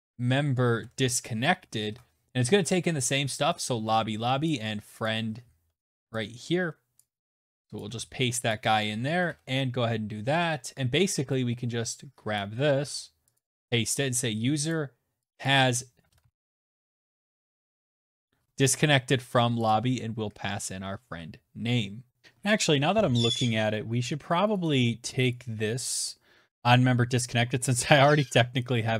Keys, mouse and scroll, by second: 0.0-1.1 typing, 3.2 click, 3.7 click, 5.7 click, 5.9 ctrl+c, 6.5 click, 6.5 ctrl+v, 7.2 click, 7.8 shift+[, 8.0 Return, 11.0 click, 11.4 ctrl+c, 12.0 click, 12.1 ctrl+v, 13.4 click, 14.0 click, 14.1 click, 14.5-17.1 typing, 18.3 click, 19.7 ctrl+s, 21.9 click.